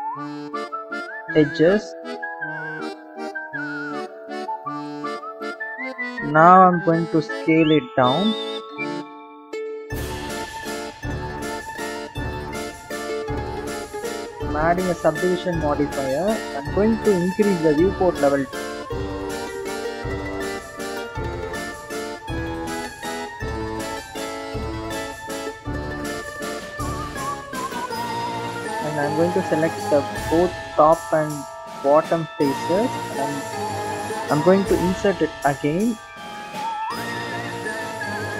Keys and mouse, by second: 0.6 alt+shift+click, 3.0 alt+shift+click, 4.3 alt+shift+click, 5.2 alt+shift+click, 5.4 alt+shift+click, 6.9 s, 12.5 click, 13.5-15.7 drag, 18.0 click, 24.6-26.8 right drag, 27.6 click, 28.0 click, 29.3 click, 31.5 shift+click, 32.6 click, 35.0 i, 38.0 s.